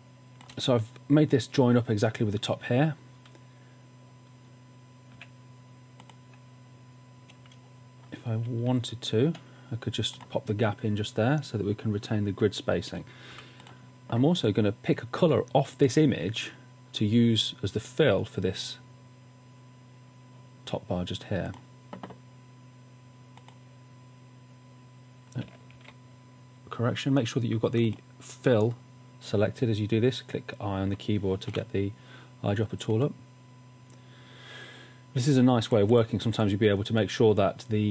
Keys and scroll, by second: 5.2 a, 8.7 shift+Down, 13.4 v, 25.8 super+z, 31.6 i.